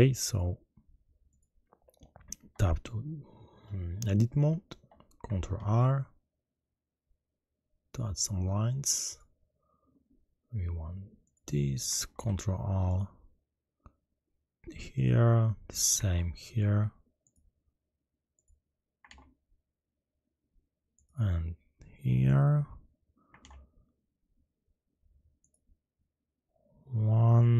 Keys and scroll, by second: 5.5 ctrl+shift+r, 12.1 ctrl+r, 16.0 ctrl+r, 19.0 ctrl+r, 23.4 ctrl+r.